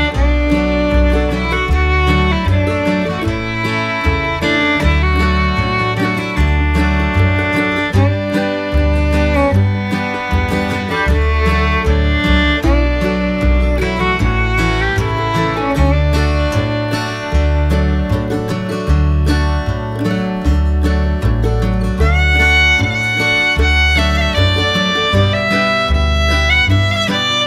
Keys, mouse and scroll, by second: 2.5 click, 4.3 middle click, 4.9 shift+middle click, 5.7 click, 6.1 shift+middle click, 7.1 click, 8.9 shift+click, 9.9 shift+click, 10.3 middle click, 11.7 shift+click, 12.2 shift+click, 12.5 middle click, 13.7 shift+click, 14.0 shift+click, 14.6 shift+click, 15.0 middle drag, 16.4 shift+click, 17.3 shift+click, 18.5 shift+click, 20.1 middle click, 21.6 shift+click, 22.2 middle click, 23.6 click, 24.5 click, 25.1 middle click, 25.7 middle click, 26.6 shift+middle click.